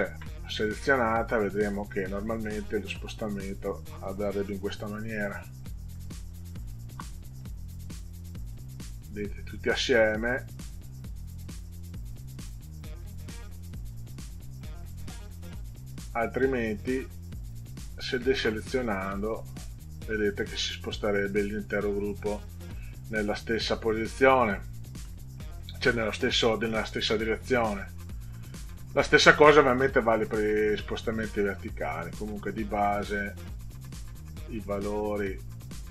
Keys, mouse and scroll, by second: 2.8-3.6 scroll up 2, 3.7 click, 5.5 click, 6.0 1, 6.9 0, 8.4 click, 9.1 click, 11.1 click, 11.9 click, 13.8 click, 17.5 click, 19.4 click, 20.0 click, 20.4 click, 20.9 click, 21.3 click, 21.8 click, 22.1 click, 22.7 click, 23.3 click, 23.7 click, 31.5 click, 35.7 click.